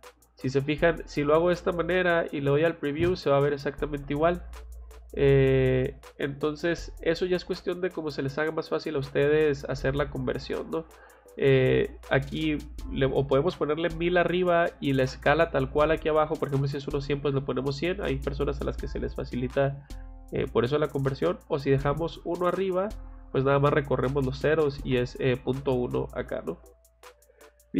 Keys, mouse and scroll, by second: 0.3 click, 1.4 click, 2.4 click, 6.9 click, 11.4 click, 15.3 click, 20.9 click, 23.0 click, 26.3 click.